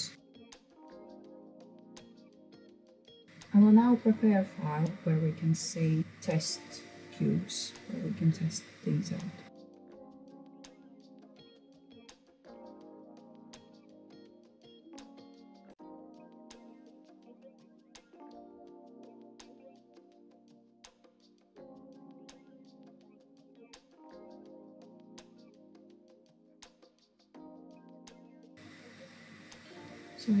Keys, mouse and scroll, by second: 1.3 middle click, 1.7 ctrl+r, 2.7 click, 2.8 scroll down 3, 2.9 middle click, 3.2-9.0 scroll up 1, 9.0 Tab, 10.3 shift+a, 11.5 KP_7, 11.9 g, 13.6 Tab, 14.0 BackSpace, 14.5 shift+b, 14.6 r, 14.7 d, 15.4 Tab, 15.8 g, 16.9 click, 17.6 shift+d, 19.1 click, 19.4-19.8 scroll down 5, 19.8 shift+d, 20.8 shift+d, 21.9 shift+d, 22.6 shift+d, 23.2 click, 23.3 scroll up 2, 23.5-23.8 scroll down 6, 23.8 shift+middle click, 23.9 scroll up 1, 24.1 shift+middle click, 24.5 scroll up 1, 24.6 click, 25.5-26.0 right drag, 26.0 Tab, 26.4 BackSpace, 26.5 BackSpace, 28.1 BackSpace, 28.2 shift+c, 28.2 i, 28.5-29.0 scroll down 5, 29.0-30.4 middle drag.